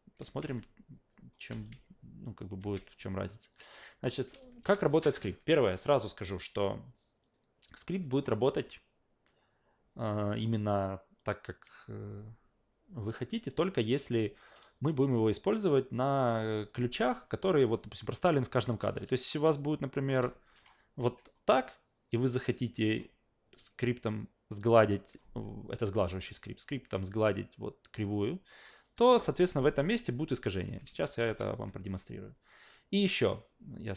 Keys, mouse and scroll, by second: 0.2 alt+v, 1.1 click, 1.5 alt+v, 2.6 alt+v, 3.0 alt+right click, 3.9 alt+middle click, 6.2-8.2 alt+right drag, 15.1-16.3 drag, 18.8 click, 19.7 click, 20.1 Delete, 22.1 click, 30.9 ctrl+z, 31.2 ctrl+z, 31.9 click, 33.2 click.